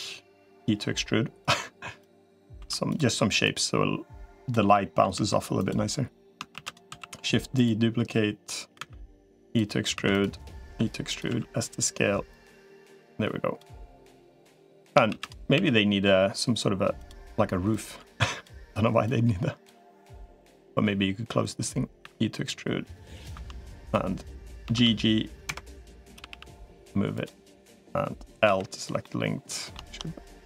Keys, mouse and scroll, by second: 0.3 e, 2.5 2, 2.7 click, 3.3-4.3 drag, 4.5 middle click, 5.1 3, 6.3 shift+d, 6.7 s, 8.7 e, 9.7 3, 9.9 click, 10.5 e, 11.1 s, 12.1-13.5 drag, 14.9 shift+d, 15.3 s, 17.5 click, 18.9 click, 20.1 click, 21.9 e, 23.3 2, 24.5 ctrl+g, 25.9 g, 28.3 l, 28.8 middle click.